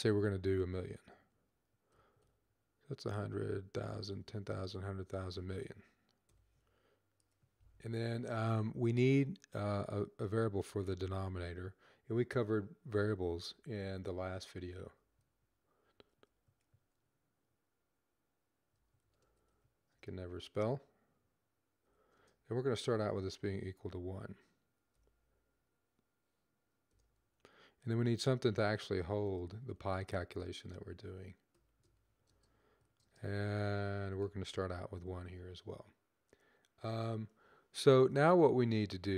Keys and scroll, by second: 0.6-1.9 typing, 3.0-5.0 typing, 6.2 typing, 10.2-11.5 typing, 12.7-16.2 typing, 18.4-19.9 typing, 21.8-23.4 typing, 26.6-30.1 typing, 31.2-32.8 typing, 34.1-34.8 typing.